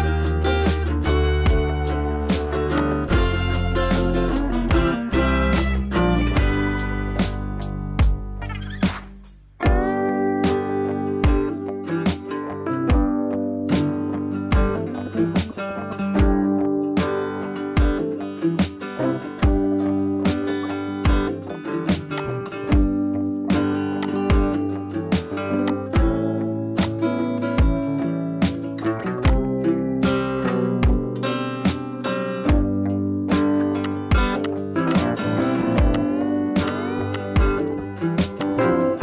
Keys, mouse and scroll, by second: 1.1 right click, 2.7 click, 4.2 right click, 5.5-17.0 drag, 21.5 scroll up 1, 21.9 space, 22.1 click, 22.4-22.8 space, 23.9 click, 24.0-26.3 drag, 28.7 scroll down 1, 29.0 space, 29.3 click, 29.5-29.8 space, 29.8 scroll down 1, 30.4 [, 30.6 [, 32.1-34.0 typing, 32.3 scroll up 1, 33.4 scroll up 1, 33.8-34.2 click, 34.4-35.7 drag, 36.6 space, 36.7-37.0 click, 36.9 space, 37.1-38.1 click, 38.2 space, 38.3 click, 38.5 space.